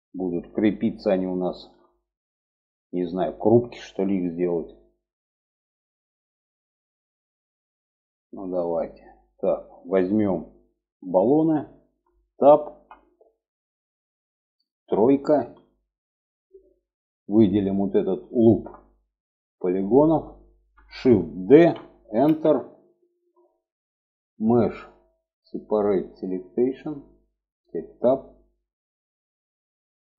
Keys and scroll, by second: 12.1 Tab, 14.7 3, 20.8 shift+d, 27.2 Tab.